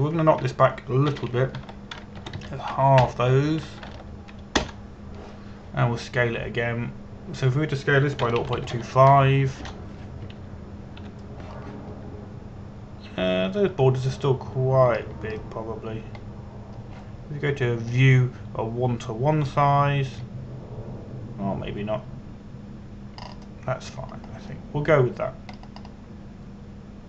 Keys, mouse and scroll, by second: 1.5 click, 2.8 End, 3.2-5.5 typing, 6.3 Return, 7.9 s, 9.9 KP_0, 10.0 KP_Decimal, 10.2 KP_2, 10.5 KP_5, 11.3 Return, 12.6 KP_Decimal, 13.3-15.2 scroll up 1, 15.2-16.6 scroll down 1, 16.6 scroll up 1, 16.8-17.2 scroll down 1, 19.6 click, 24.8 scroll up 1.